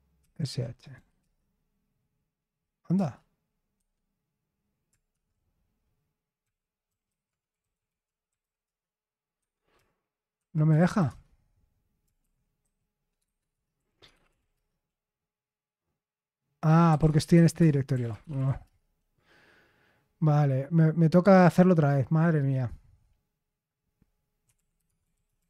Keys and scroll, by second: 0.0-0.9 typing, 1.1 Return, 2.9 Return, 3.7 Escape, 4.8-8.8 typing, 9.3 Escape, 10.1-15.0 typing, 16.7-18.9 typing, 24.2-25.4 typing.